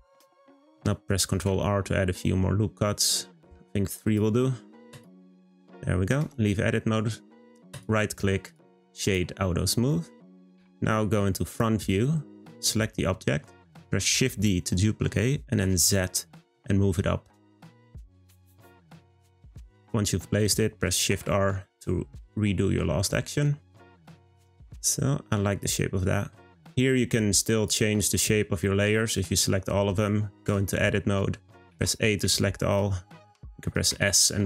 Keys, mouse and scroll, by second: 1.3 r, 5.5 click, 6.1 Tab, 7.7 right click, 9.0 click, 10.5 `, 12.5 click, 14.1 shift+d, 21.1 shift+r, 22.1-23.3 middle drag, 23.3-23.8 scroll down 3, 23.8-26.8 middle drag, 27.4 click, 30.4 Tab, 31.1 middle click, 31.7 a, 33.2 s.